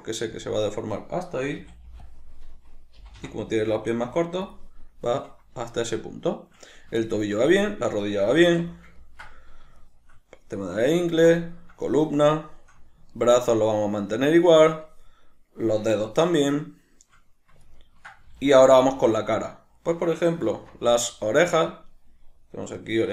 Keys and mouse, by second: 0.4 click, 1.4 a, 4.5 click, 5.7-21.4 shift+middle drag, 8.4 alt+q, 18.4 alt+q, 20.5 alt+q, 21.4 right click, 22.8 shift+right click.